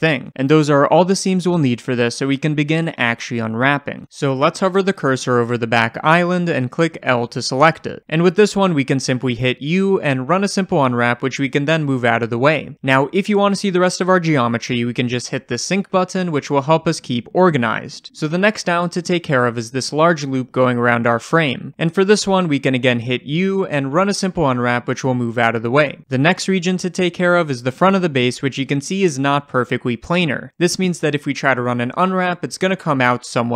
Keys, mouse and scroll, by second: 0.4-1.8 right drag, 0.5-1.8 scroll down 2, 1.8-14.4 shift+middle drag, 4.2 3, 7.1 l, 14.4 click, 16.8-18.8 shift+middle drag, 17.2-17.7 scroll up 1, 18.8 click, 19.7 l, 25.2 click, 25.6-26.7 middle drag, 26.7 click, 27.7 l, 32.4-33.1 scroll up 1, 33.1-33.5 shift+middle drag.